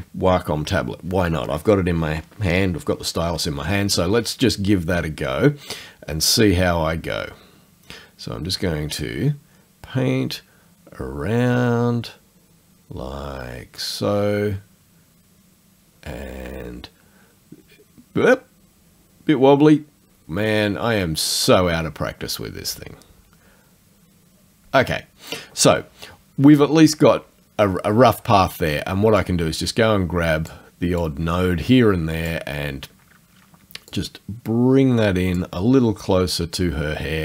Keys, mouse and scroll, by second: 6.7-24.8 drag, 29.2 click, 31.0 click, 33.9-35.6 drag.